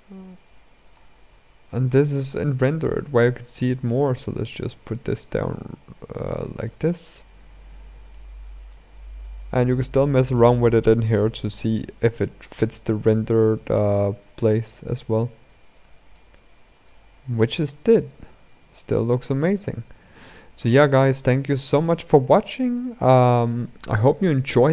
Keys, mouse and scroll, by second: 0.8-1.6 scroll up 7, 1.6-3.7 shift+middle drag, 3.7 g, 6.6-6.9 scroll down 2, 6.9-9.3 middle drag, 9.3 click, 11.6-15.9 drag, 15.9-16.8 middle drag, 16.8-17.5 scroll up 7, 17.7-19.9 shift+middle drag, 19.9-21.2 scroll down 10, 21.2-21.7 middle drag, 21.7-22.3 scroll down 2, 22.3-23.6 scroll up 3.